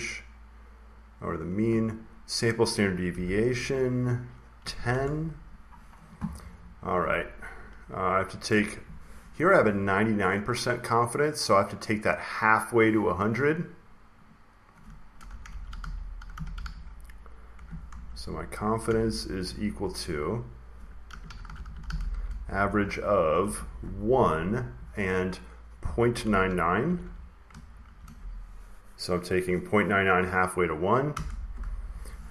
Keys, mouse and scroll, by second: 1.1 typing, 2.8-5.0 typing, 6.8 click, 10.1 click, 10.8 click, 11.7 click, 14.1-15.3 drag, 14.9-18.7 typing, 20.7-23.8 typing, 26.1-27.7 typing, 31.0 Return.